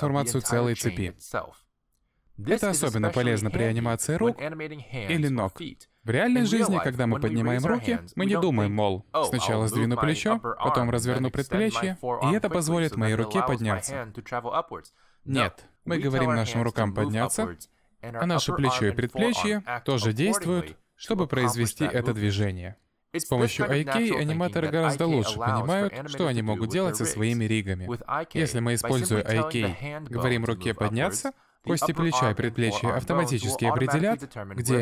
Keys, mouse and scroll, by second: 2.2 click, 2.7 shift+middle click, 3.1 g, 4.2 click, 4.4 g, 5.6 click, 5.8 middle click, 6.1 g, 6.8 middle click, 7.2 g, 7.9 middle click, 8.7 shift+middle click, 9.2 g, 11.3 click, 11.9 middle click, 12.2-12.7 scroll down 3, 12.4 shift+middle click, 12.7 middle click, 12.9-13.2 scroll up 1, 13.2 click, 13.6 r, 14.4 click, 14.7 r, 15.5-15.9 scroll down 2, 16.3 click, 16.7 g, 19.9 middle click, 20.5 g, 26.8 middle click, 27.2 r, 28.8 middle click, 29.2 g, 30.6 middle click, 30.9 middle click, 31.6 g, 32.1 middle click, 32.9 middle click, 33.2 g.